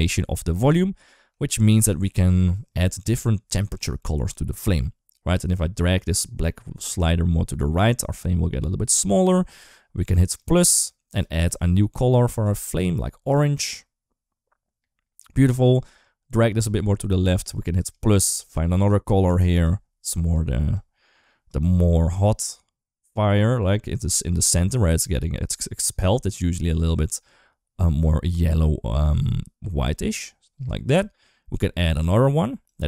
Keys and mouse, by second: 0.6 shift+middle click, 1.4 shift+middle click, 5.3-9.5 drag, 10.1 click, 10.9 click, 15.8-17.2 drag, 17.6 click, 18.3 click, 19.3 click, 31.7 click, 32.5 click.